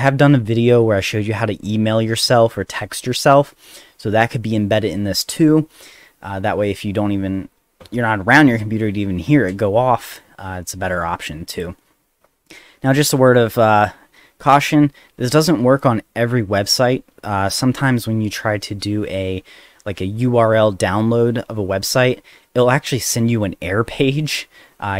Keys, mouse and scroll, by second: 10.0 click, 11.5 click.